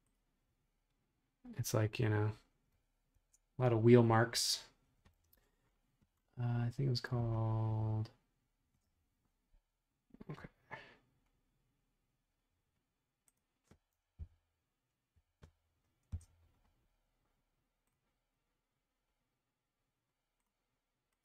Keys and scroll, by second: 3.1 super+Tab, 14.1 Page_Down, 15.1 Page_Up, 16.1 Return.